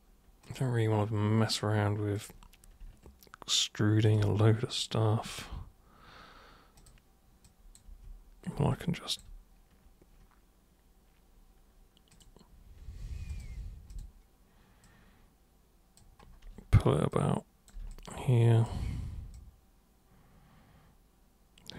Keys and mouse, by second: 0.4 super+click, 2.2 super+click, 4.1 ctrl+super+click, 5.3 super+click, 6.8 super+click, 7.4 super+click, 7.8 super+w, 8.8-9.1 alt+super+drag, 12.1 super+click, 13.3 super+click, 13.9 super+click, 14.8 super+click, 17.1 super+click, 17.9-18.6 alt+super+drag, 19.3-21.7 super+drag.